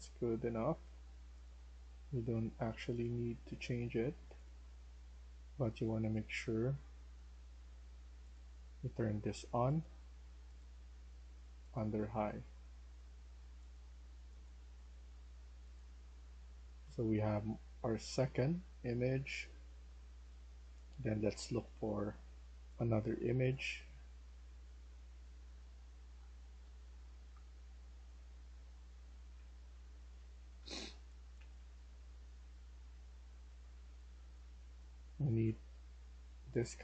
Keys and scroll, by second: 19.8 d, 21.9-34.3 typing, 35.4 typing.